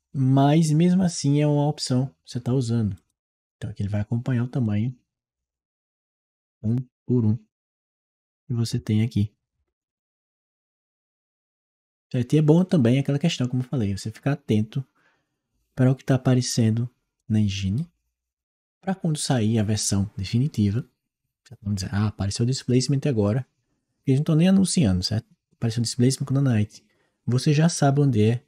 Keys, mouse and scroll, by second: 2.8 click, 4.5 click, 4.6 click, 6.4 click, 6.8 click, 8.0 click, 8.3 click, 9.4 Return, 10.6 click, 11.0-12.4 right drag, 12.4 click, 17.0-21.0 right drag.